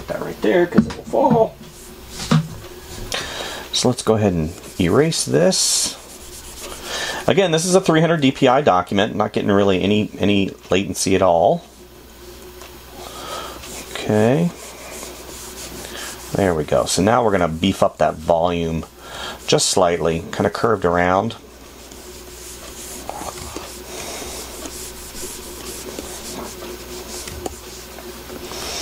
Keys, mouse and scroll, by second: 5.2 e, 8.1 space, 18.8 space, 23.8 space, 27.6 space.